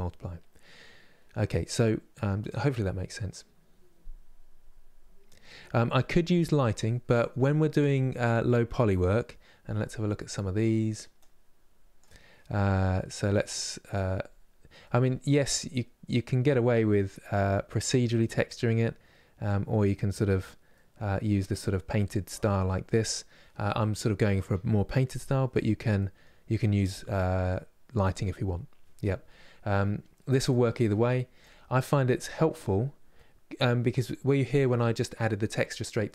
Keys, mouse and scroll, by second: 31.8-32.2 scroll down 1, 32.2-32.9 scroll up 3, 32.9-36.1 middle drag.